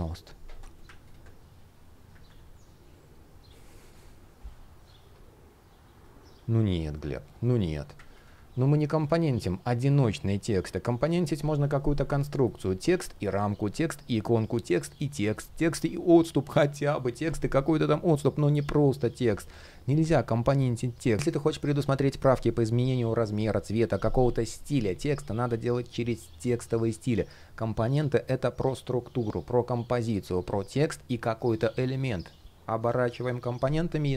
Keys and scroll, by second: 1.9 super+\, 12.7 shift+o.